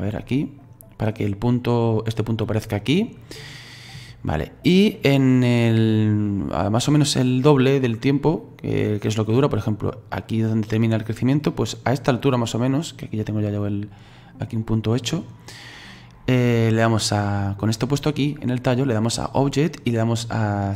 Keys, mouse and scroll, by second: 0.6 click, 2.8 middle click, 3.4-4.3 scroll down 2, 5.3-8.4 drag, 14.5-17.5 middle drag, 19.1-20.7 drag.